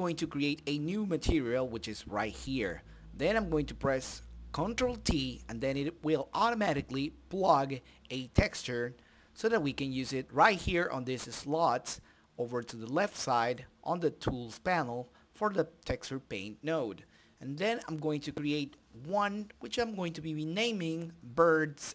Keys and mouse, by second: 0.5-1.7 drag, 1.7 middle click, 2.5-3.8 drag, 3.9 ctrl+t, 4.8 middle click, 5.6-8.9 drag, 9.5-10.8 drag, 20.3 BackSpace, 20.5 BackSpace, 20.6 BackSpace, 21.0 BackSpace.